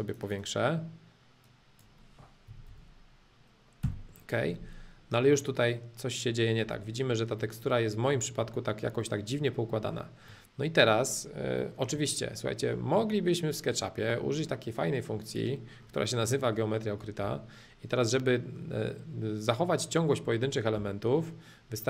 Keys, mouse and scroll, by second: 0.0-2.0 drag, 5.0-11.1 middle drag, 11.5-13.0 shift+middle drag, 14.3-14.8 scroll up 2, 14.8 middle click, 15.7-17.2 middle drag, 17.2 h, 18.0-20.0 drag, 20.7 b.